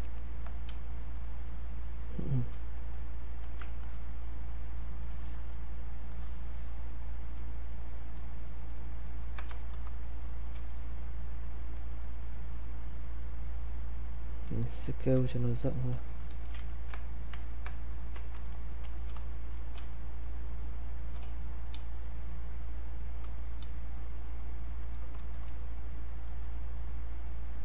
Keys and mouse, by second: 0.7 space, 1.5 click, 1.6 space, 3.8-7.4 ctrl+drag, 9.7 r, 10.7-15.6 alt+drag, 15.6 click, 16.7 ctrl+right click, 17.4 ctrl+click, 19.1 space, 21.2 q, 21.8 space, 22.1 click, 22.3 space, 24.2 click.